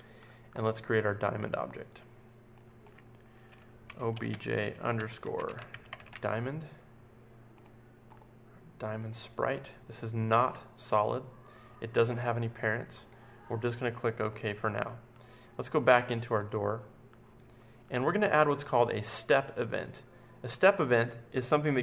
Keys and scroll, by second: 3.6-6.6 typing.